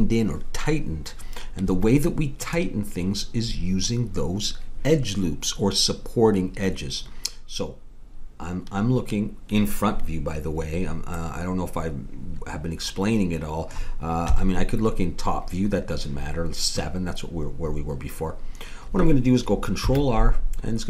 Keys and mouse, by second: 1.6 Tab, 11.2 middle click, 14.3 KP_7, 19.8 ctrl+r.